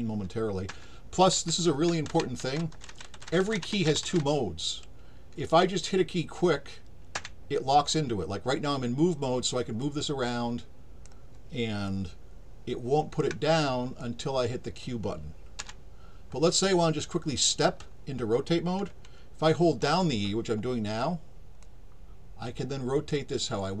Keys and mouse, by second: 9.8-11.0 drag, 11.9-13.2 alt+drag, 14.0 click, 21.6-23.1 drag, 21.6 e.